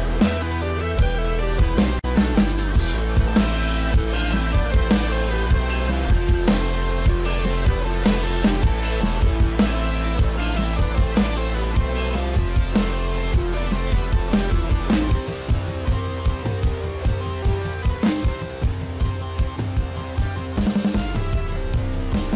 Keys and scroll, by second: 9.8 ctrl+j.